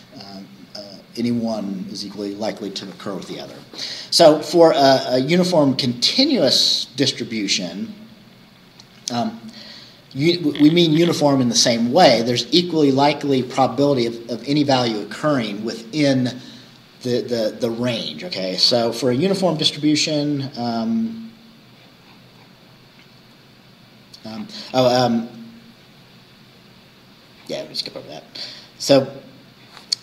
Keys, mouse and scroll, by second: 7.7-8.1 scroll down 1, 19.3-19.8 scroll down 2, 20.5-21.0 scroll up 2, 21.0 scroll down 2, 22.1-22.7 scroll down 4, 24.3-25.5 scroll up 2, 25.5-27.6 scroll down 2.